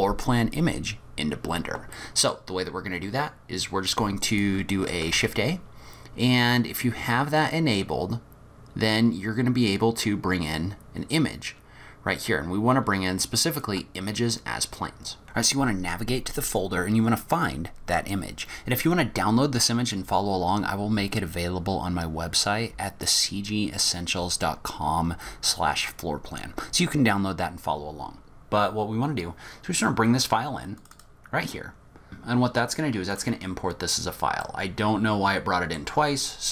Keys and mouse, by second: 1.9 middle click, 4.3 click, 4.7 middle click, 5.1 shift+a, 34.5-35.8 middle drag.